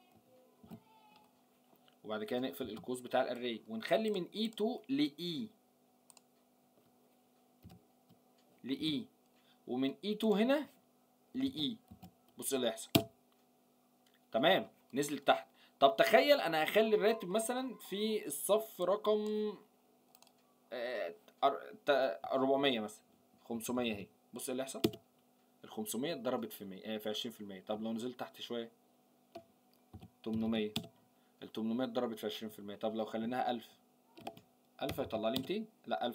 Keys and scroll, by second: 0.6 ctrl+v.